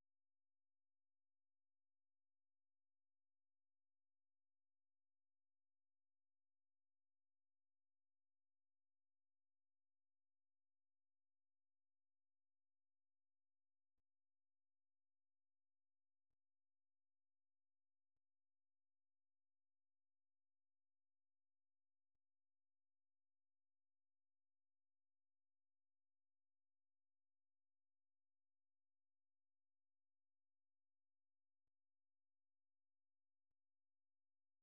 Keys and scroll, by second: 4.4 ctrl+c, 5.0 super+1, 6.2 o, 6.6 ctrl+[, 6.9 o, 7.2 ctrl+v, 7.6 ctrl+[, 8.1 o, 8.8 super+2, 10.0 super+1, 12.1 ctrl+', 12.5 ctrl+[, 13.0 super+2, 14.0-14.8 typing, 16.1 typing, 21.5-22.1 typing, 29.2 ctrl+c, 30.8 super+1, 31.6-34.6 typing.